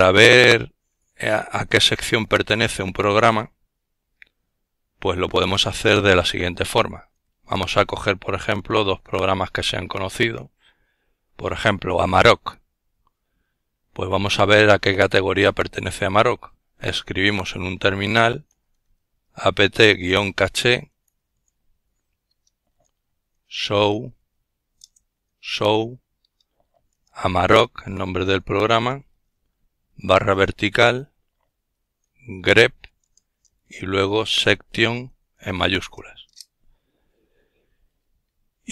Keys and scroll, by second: 3.6 ctrl+alt+t, 14.4-18.7 typing, 20.3-21.5 typing, 22.8-25.0 typing, 26.1 typing, 27.5-32.1 typing, 32.5 Return.